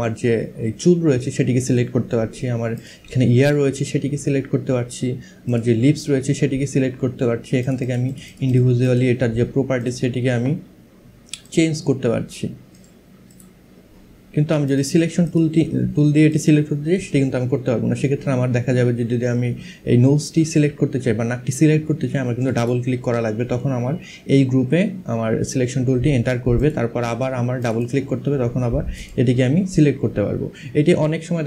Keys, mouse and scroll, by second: 2.4 click, 5.2 click, 7.2 click, 11.0 click, 12.4 click, 14.3 click, 15.9 click, 22.0 click, 26.2 click, 28.6 click.